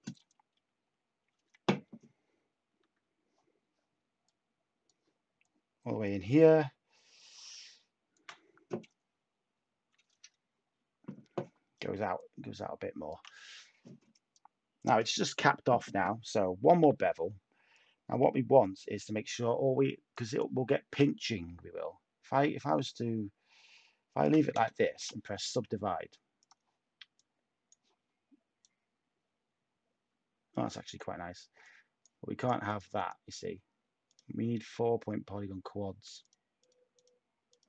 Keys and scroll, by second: 16.6 typing, 24.9 /, 25.6 Tab.